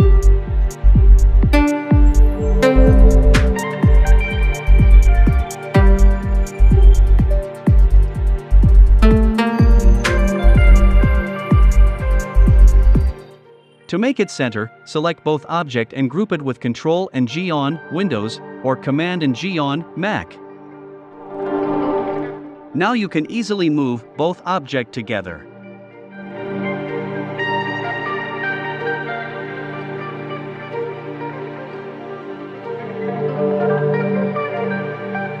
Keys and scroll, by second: 0.4 i, 1.9 v, 3.1 super+c, 3.9 super+f, 4.3 shift+Right, 5.3 shift+Right, 5.9 shift+Right, 7.1 shift+Right, 20.2 super+g.